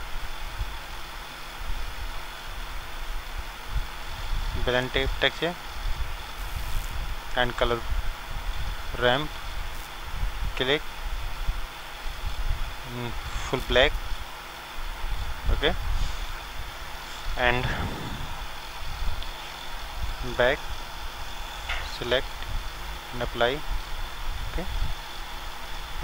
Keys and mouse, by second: 7.4-12.5 drag, 20.2-23.4 drag.